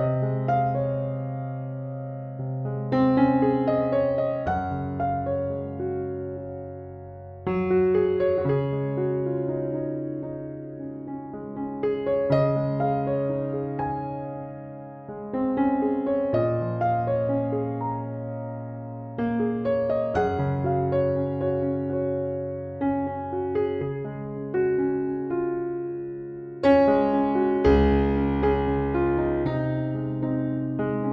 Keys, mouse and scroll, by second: 0.3-3.1 right drag, 1.8 e, 2.2 w, 7.3 click, 10.1 click, 11.0 right click, 13.5-14.6 drag, 15.8 click, 17.7 click, 20.0-21.3 drag, 22.3-23.6 drag, 24.5 click, 25.4 click, 26.1 click, 27.3-27.7 scroll down 2, 27.4 middle click, 29.6-30.7 drag.